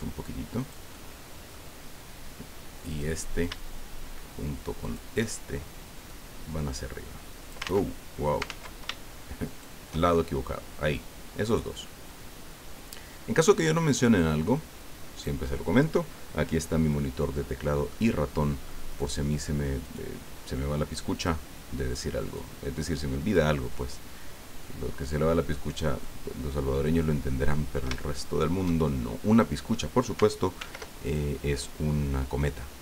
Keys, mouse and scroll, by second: 0.6 click, 2.9 right click, 4.9 shift+right click, 6.1-7.7 drag, 7.6 ctrl+z, 8.4 ctrl+z, 9.4 shift+right click, 10.9-15.4 drag, 16.9 middle click, 17.6 middle click, 18.9 right click, 19.8 right click, 21.1 click, 22.2 right click, 23.3-25.9 drag, 26.0-27.6 middle drag, 27.7 scroll up 2, 28.0 shift+middle click, 28.9 shift+click, 30.6 ctrl+r, 31.0 ctrl+click.